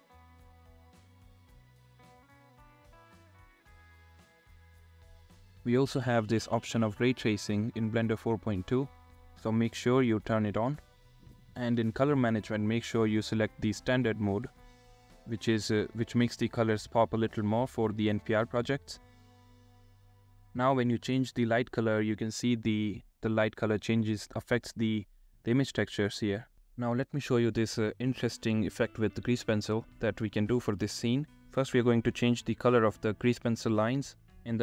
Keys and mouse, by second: 3.3 click, 4.2 click, 5.3-6.3 middle drag, 8.5-9.2 middle drag, 10.3 middle click, 11.3-13.1 middle drag, 13.6-14.3 middle drag, 16.1 click, 16.6-17.0 drag, 21.5 click, 23.0-23.8 drag, 25.5-26.0 drag, 27.0 click, 27.6 click, 28.6-29.0 drag, 33.1-34.6 drag.